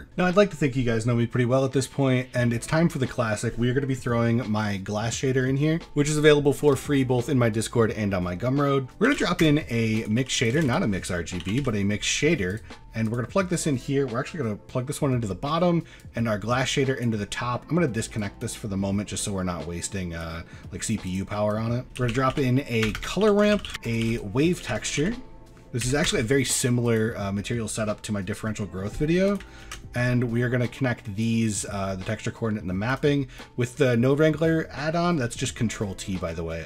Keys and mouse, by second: 1.7 middle click, 2.5 middle click, 3.2 middle click, 8.8 shift+a, 10.2 x, 10.5 click, 10.6 shift+a, 14.1-15.0 drag, 16.0-17.1 drag, 17.3 middle click, 18.2 drag, 18.8 middle click, 20.1-21.1 drag, 21.5 click, 21.8 shift+a, 22.3 o, 23.0 BackSpace, 23.7 middle click, 24.0 shift+a, 27.3 middle click, 28.4 middle click, 29.6 ctrl+t, 30.2 middle drag, 30.7 click, 32.5 middle click, 32.9 drag, 33.4 click, 36.0 middle click.